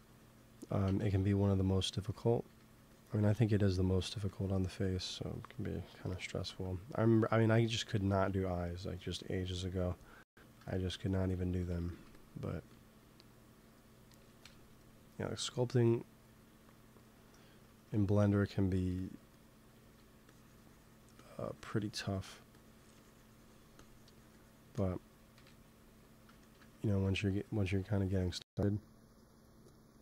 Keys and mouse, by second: 0.8 ctrl+z, 1.5 middle click, 1.9 f, 2.0-4.4 drag, 2.4 f, 3.8 f, 6.0 KP_1, 9.3 KP_3, 11.6 g, 11.8 f, 12.5 f, 13.0-14.8 drag, 14.3 KP_1, 16.1-18.2 drag, 18.6 f, 19.7 f, 20.2-25.3 drag, 25.3 KP_1, 26.8 f, 27.2-28.2 drag, 27.6 f, 28.4-30.0 drag, 28.6 f.